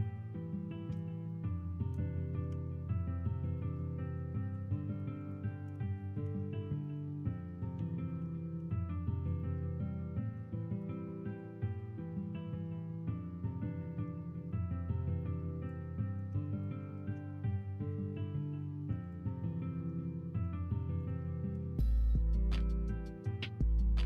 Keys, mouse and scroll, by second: 0.0-1.4 scroll up 2, 1.4-2.4 middle drag, 2.4 Tab, 2.9-3.4 middle drag, 5.9 middle click, 6.3 Tab, 6.8 middle click, 7.7 l, 8.1 l, 8.5 l, 9.9 middle click, 11.6-15.6 drag, 15.9 middle click, 16.1 scroll down 1, 16.3 Tab, 16.6 middle drag, 17.0 alt+z, 17.3-17.8 middle drag, 19.4 middle click, 21.7-22.1 middle drag, 23.1-24.0 middle drag.